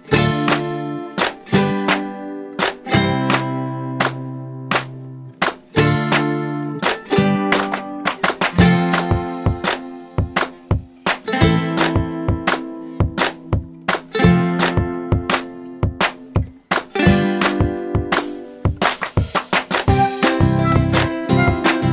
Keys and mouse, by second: 1.4 click, 3.8 click, 8.3 click, 10.4-13.1 drag, 14.9 click, 20.2 click.